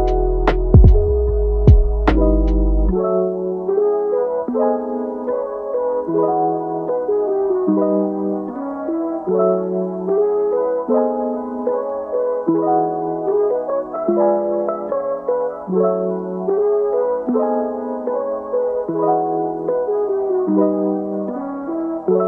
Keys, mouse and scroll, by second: 0.5 Tab, 1.7 click, 2.1 g, 3.1 click, 3.5 g, 4.3 click, 4.5 g, 5.2-6.2 middle drag, 6.2 click, 6.5 g, 7.2-8.0 middle drag, 8.0 click, 8.2 g, 8.8-9.5 middle drag, 9.5 click, 9.9 g, 13.7 click, 15.7 g, 17.3 g, 19.2 click, 19.5 g, 21.4 alt+s.